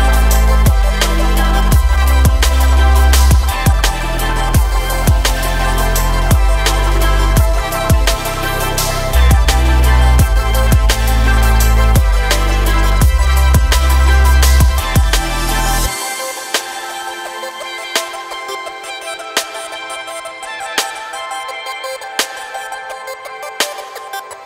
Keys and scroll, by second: 19.4 ctrl+e, 20.7 Escape, 21.7 shift+e.